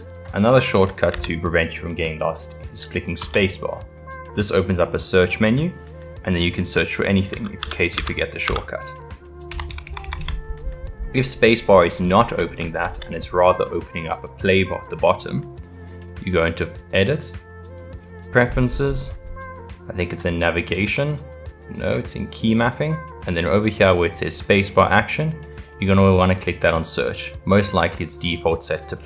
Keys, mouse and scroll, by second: 0.1 click, 1.1 n, 1.8-3.3 middle drag, 3.3 space, 8.0 d, 9.7 BackSpace, 10.0 BackSpace, 10.2 BackSpace, 12.4 space, 16.1-19.3 drag.